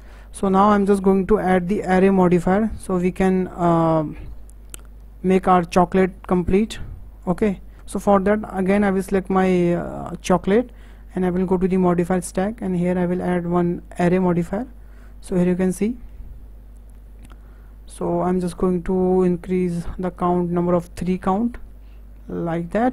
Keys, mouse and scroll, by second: 0.2-0.5 middle drag, 0.5-0.9 scroll down 2, 0.9 shift+middle click, 1.8-2.1 scroll down 5, 2.1-3.0 middle drag, 3.0-3.6 scroll up 4, 3.6-5.7 shift+middle drag, 5.7-6.1 scroll down 2, 6.1-7.2 shift+middle drag, 7.2 click, 10.6 click, 12.2-15.2 drag, 15.2-15.9 scroll up 3, 15.9-18.9 shift+middle drag, 20.2 click, 20.7-21.2 scroll down 3, 21.2-22.9 shift+middle drag.